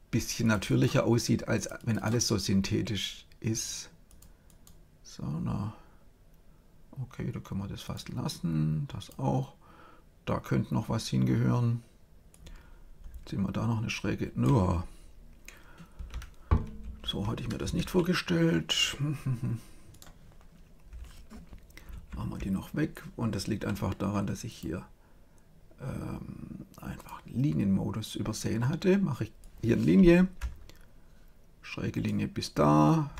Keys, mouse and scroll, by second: 4.0 click, 7.8-10.5 drag, 12.2-14.0 drag, 21.9 ctrl+z, 24.4-26.2 drag, 29.3-31.2 drag.